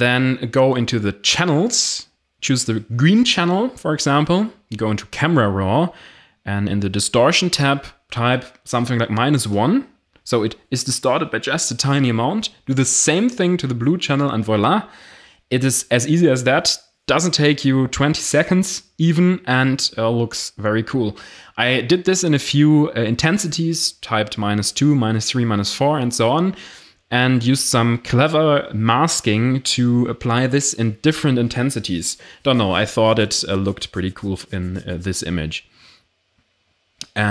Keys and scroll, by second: 0.0 ctrl+alt+shift+e, 8.4 1, 8.5 Delete, 9.9 Delete, 15.2 Delete.